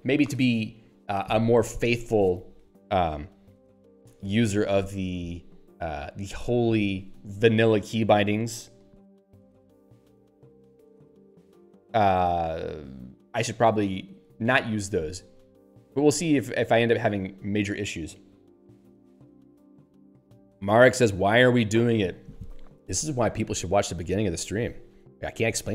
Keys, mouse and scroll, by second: 24.4 click.